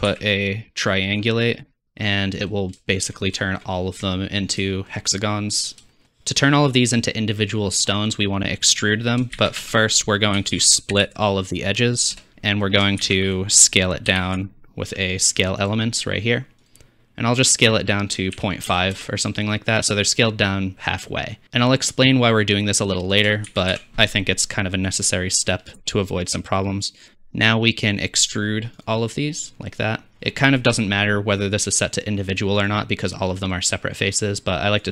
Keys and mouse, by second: 0.1 shift+a, 6.0-9.6 drag, 9.4 shift+a, 13.0 shift+a, 17.6-20.3 drag, 23.5 shift+a, 29.4-32.0 drag, 29.4 middle click, 29.4 right click, 32.6 click, 34.2 click.